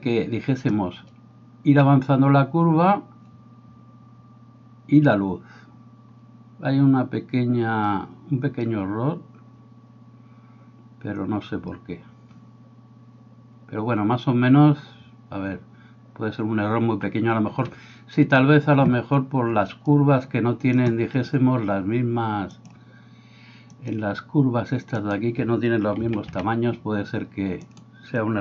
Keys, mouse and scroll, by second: 16.9 Escape, 17.5 Escape, 19.2 Escape, 25.0 middle click, 25.0 right click, 26.0 a, 26.3 a, 27.6 middle click, 27.6 right click.